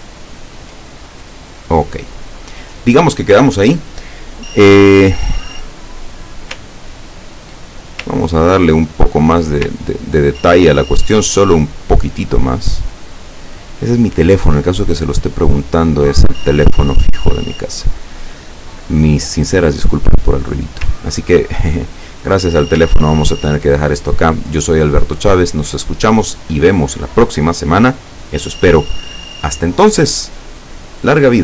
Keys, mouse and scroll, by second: 0.2-0.6 ctrl+scroll up 2, 1.0 ctrl+click, 6.1-7.4 scroll down 3, 8.2-9.2 ctrl+middle drag, 9.9-11.0 ctrl+scroll down 2, 11.0-11.7 scroll down 1, 11.7-12.2 scroll down 1, 12.3-13.9 drag, 15.5-17.4 drag, 17.8-19.5 drag, 22.0 click, 22.5 click, 23.0-23.5 ctrl+scroll down 4, 24.2-25.5 scroll down 6.